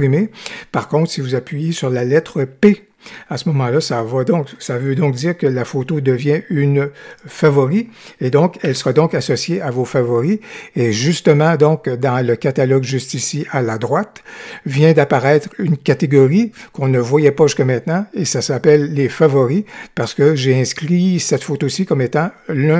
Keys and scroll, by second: 8.7 p.